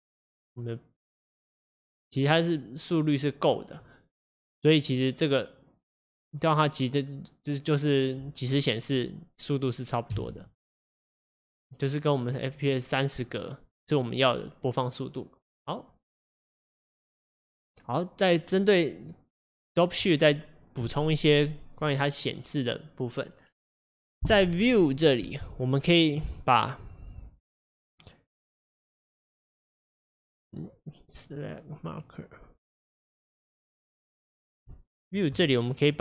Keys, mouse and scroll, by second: 0.5 click, 10.3 space, 30.8-36.0 drag.